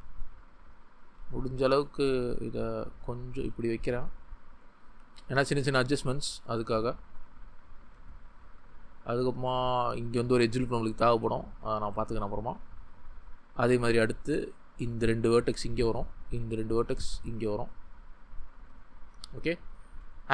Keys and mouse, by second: 1.0 click, 2.1 g, 3.3 click, 5.4 g, 6.9 click, 7.7 click, 7.7 g, 9.6 click, 10.3 g, 11.1 click, 11.8 ctrl+z, 13.8 g, 16.3 g, 18.3 click, 19.3 ctrl+click.